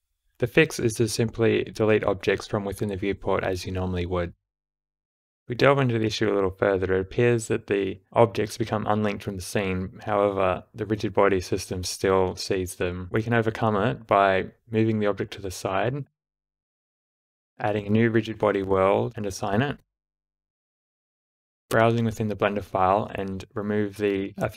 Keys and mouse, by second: 1.7 click, 2.2 Delete, 3.5 space, 5.2 shift+Left, 5.2-10.3 typing, 6.6-7.6 drag, 8.2-9.6 drag, 12.9 space, 14.3 g, 15.2 click, 15.6 space, 17.1 space, 17.4 shift+Left, 17.9 click, 18.8 click, 19.6-20.8 drag, 21.3 click, 21.5-22.5 drag.